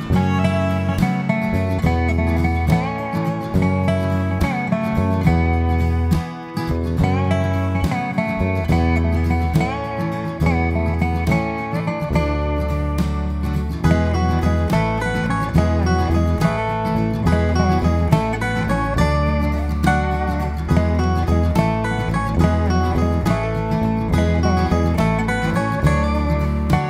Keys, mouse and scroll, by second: 0.4 g, 3.7 click, 4.6 g, 5.7 click, 6.5 click, 6.6 g, 7.2 click, 7.3 g, 9.1 middle click, 9.3-10.3 scroll down 5, 9.6 middle click, 10.7-11.1 scroll down 2, 11.1 middle click, 11.3-11.9 scroll up 3, 11.9 ctrl+s, 14.8-16.1 scroll down 1, 16.1 middle click, 16.5 Tab, 16.8 middle click, 22.1 click, 22.3 middle click, 22.8 KP_7, 23.4 click, 23.5 click, 24.3 middle click, 25.9 click.